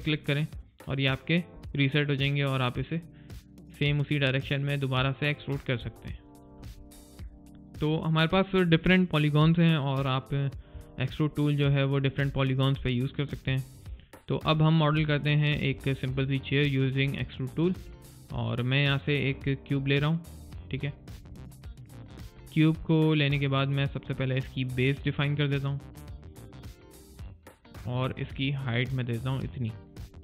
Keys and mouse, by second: 5.9 alt+right click, 6.1 alt+click, 6.5 alt+middle click, 6.8 alt+click, 7.3 middle click, 7.8 click, 10.7 middle click, 11.2 click, 13.5 right click, 14.0 middle click, 14.4 click, 15.8 right click, 16.1 middle click, 16.5 click, 17.0 middle click, 19.0 click, 21.5 middle click, 24.8 alt+click.